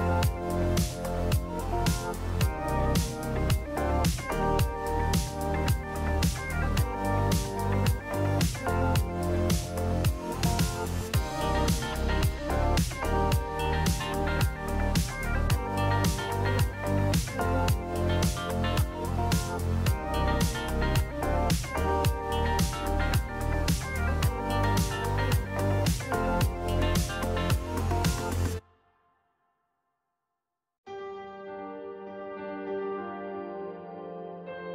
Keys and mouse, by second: 3.7 click, 5.0 KP_Decimal, 6.6 click, 7.9 m, 12.8 alt+z, 13.0 click, 13.4 Tab, 13.9-15.4 drag, 16.2 KP_3, 18.2 shift+middle click, 18.9 Tab, 20.0 middle click, 21.6 ctrl+z, 21.8 KP_3, 22.1 Tab, 23.1 Tab, 25.1 ctrl+r, 29.1 Tab, 29.7 click, 31.1 click, 31.4 Tab, 31.7 click, 33.0 click, 34.6 KP_3.